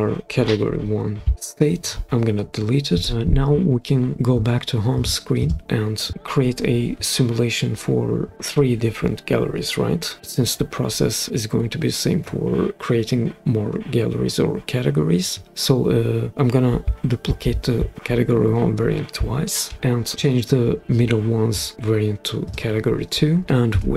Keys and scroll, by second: 2.9 BackSpace, 19.6 super+d, 23.7 super+p.